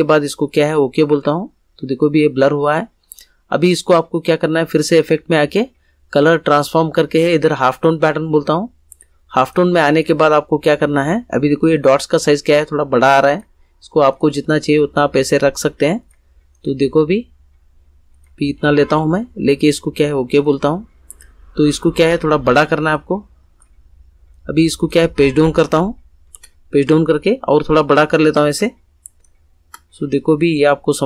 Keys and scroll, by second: 26.2 shift+Page_Down.